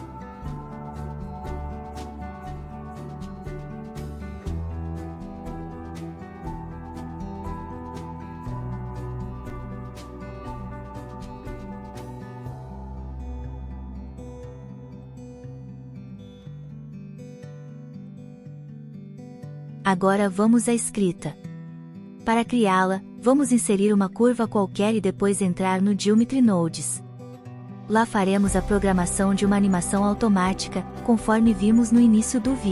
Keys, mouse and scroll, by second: 1.6 click, 1.8 click, 2.3 click, 5.7 Tab, 6.6 click, 6.8 KP_0, 7.3 n, 7.5 shift+middle click, 7.9 click, 9.0-11.1 drag, 11.5 n, 11.7 click, 13.4 ctrl+a, 16.3 n, 17.7 F2, 23.7-24.1 drag, 25.0-25.5 middle drag, 26.2 shift+a, 30.2-30.6 shift+middle drag.